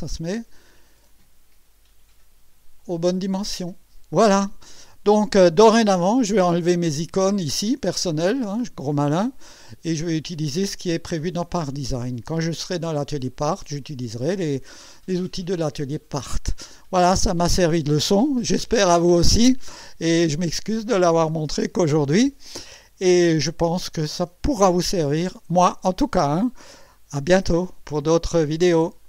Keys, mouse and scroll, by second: 4.9 scroll up 2, 5.3 scroll down 2, 19.7-20.4 right drag, 20.4-25.6 drag.